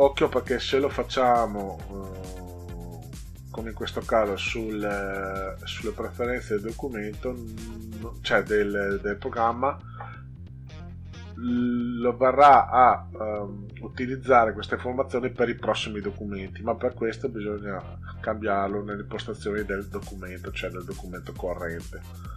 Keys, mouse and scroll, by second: 0.0 click, 2.0 click, 6.9 click, 15.9 click, 17.2 click, 21.8 click.